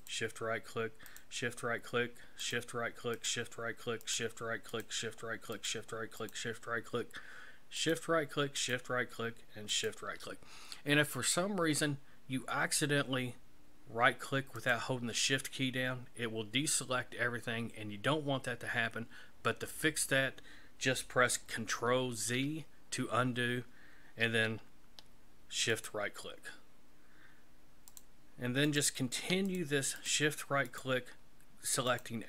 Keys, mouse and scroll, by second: 0.0 shift+right click, 1.1 shift+right click, 2.4 shift+right click, 3.1 shift+right click, 4.0 shift+right click, 4.7 shift+right click, 5.5 shift+right click, 6.2 shift+right click, 7.8 shift+right click, 8.6 shift+right click, 9.7 shift+right click, 14.5 right click, 22.1 ctrl+z, 25.7 shift+right click, 27.9 shift+right click, 28.6 shift+right click, 29.4 shift+right click, 29.9 shift+right click, 30.6 shift+right click, 31.9 shift+right click.